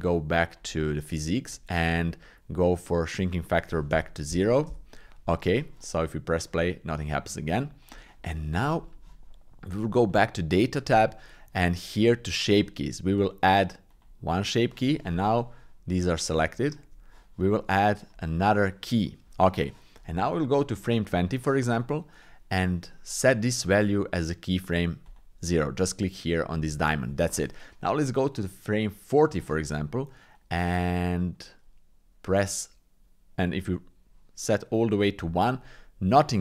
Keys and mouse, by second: 3.2-4.7 drag, 6.5 click, 7.9 click, 8.3 middle click, 8.8 shift+middle click, 14.0 click, 15.1 Tab, 16.3 Tab, 18.0 click, 20.7 click, 25.1 click, 28.3 click, 30.5-35.6 drag.